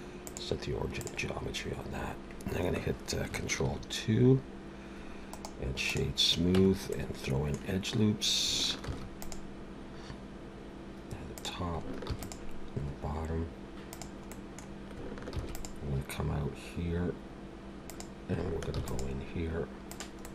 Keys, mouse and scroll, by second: 3.6 ctrl+2, 5.3 right click, 6.5 Tab, 6.9 middle click, 8.8 ctrl+r, 12.1 ctrl+r, 14.3 middle click, 15.3 ctrl+r, 18.7 ctrl+r, 20.2 middle click.